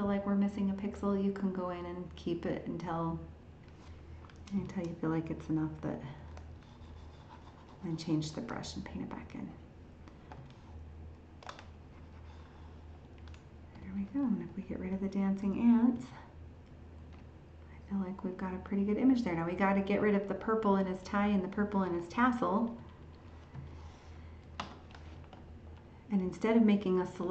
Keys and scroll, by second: 15.9 ctrl+h.